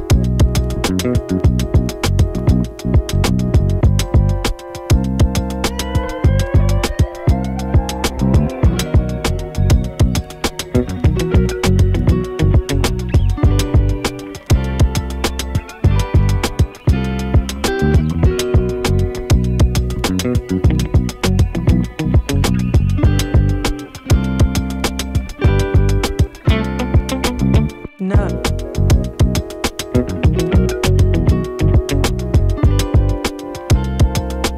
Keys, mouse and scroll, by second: 0.1 space, 0.8 click, 1.0 space, 8.6 space, 10.2 n, 10.5 space, 14.8 space, 17.5 space, 19.6 click, 20.1 u, 21.3 click, 21.6 u, 22.4 space, 23.1-28.3 drag, 28.3 space, 30.5 click, 30.7 space, 32.4-34.5 drag.